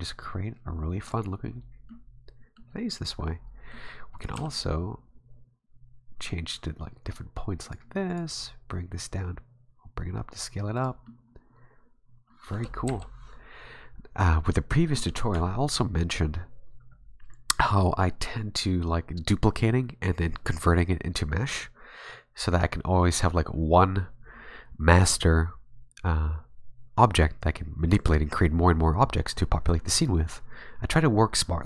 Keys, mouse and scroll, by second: 1.3-1.8 scroll down 4, 1.9 middle click, 3.0 right click, 3.3 middle click, 4.2 right click, 4.3 g, 8.1 right click, 8.3 g, 11.1 middle click, 12.8 KP_1, 15.3 Tab.